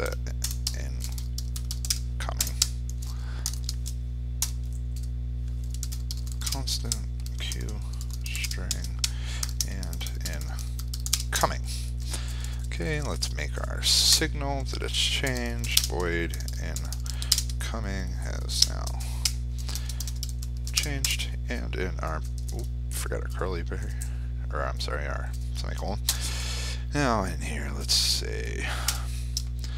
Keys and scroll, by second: 17.2 ctrl+space.